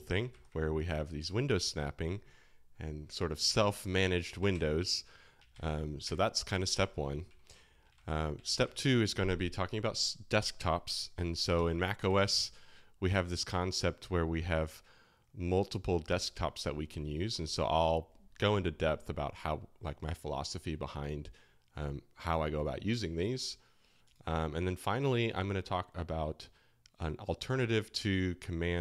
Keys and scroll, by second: 0.3 super+n, 3.5 alt+shift+h, 4.5 alt+shift+l, 5.5 alt+k, 6.0 alt+h, 6.7 alt+shift+l, 7.2 alt+j, 7.9 alt+shift+k, 8.4 alt+shift+h, 12.0 [, 27.5 super+Tab, 28.7 super+Escape.